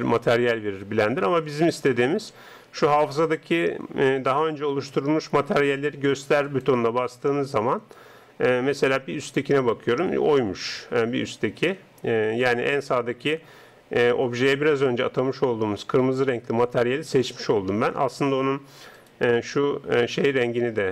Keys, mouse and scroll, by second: 6.5-9.8 drag, 19.0 right click.